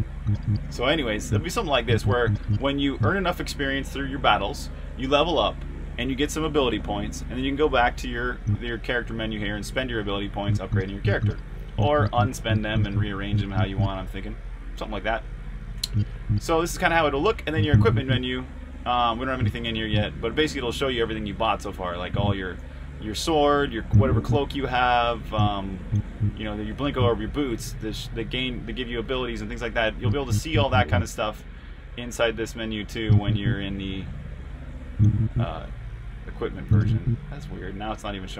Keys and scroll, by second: 1.7-2.8 typing, 8.2 typing, 10.4-13.3 typing, 15.6 typing, 17.1-17.8 typing, 19.2-23.7 typing, 24.8-26.7 typing, 28.8-33.0 typing, 34.6-35.3 typing.